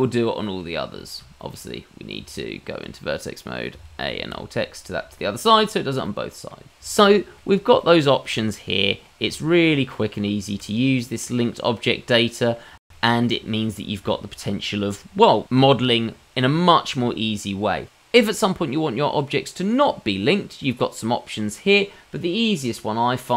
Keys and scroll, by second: 1.1 Tab, 2.2 a, 2.5 alt+x, 11.0 Tab.